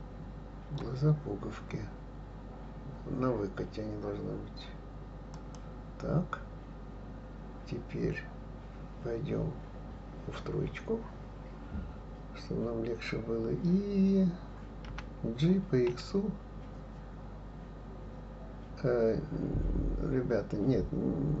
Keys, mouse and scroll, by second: 10.6 KP_3, 14.9 g.